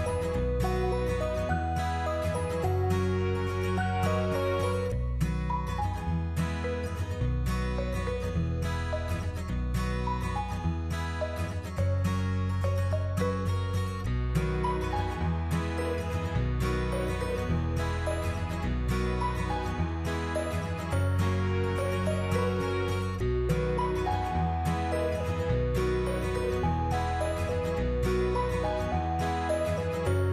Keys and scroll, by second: 5.2 Delete, 8.1 Tab.